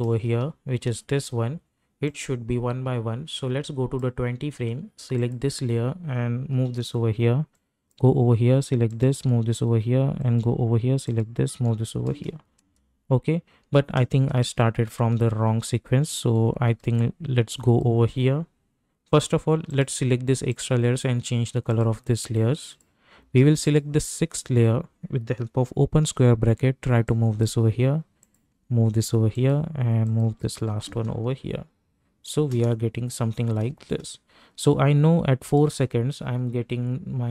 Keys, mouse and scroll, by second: 0.1 space, 2.0-5.2 drag, 6.6 [, 7.5-8.9 drag, 9.1 [, 10.2 click, 11.5 [, 12.1 space, 15.1 ctrl+z, 16.9 ctrl+z, 17.5 click, 19.7 shift+click, 27.0 click, 28.5 [, 29.3 click, 30.2 [, 30.8 space, 34.6-37.3 drag.